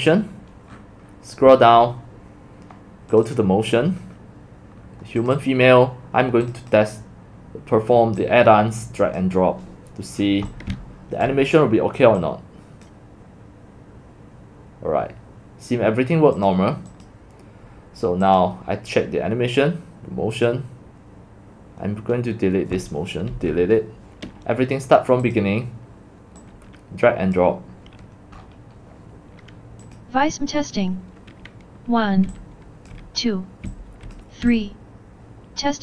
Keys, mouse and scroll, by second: 0.0 click, 0.8 middle click, 1.5 middle click, 1.9 scroll up 1, 3.1 click, 3.3 click, 5.2 click, 8.2 click, 10.2-11.2 typing, 10.5 click, 12.2 click, 16.4 click, 17.0 click, 18.3 click, 20.3 click, 23.3 Delete, 24.8 click, 25.3 click, 26.4 click, 28.4 click, 30.0 click, 32.6-35.8 typing.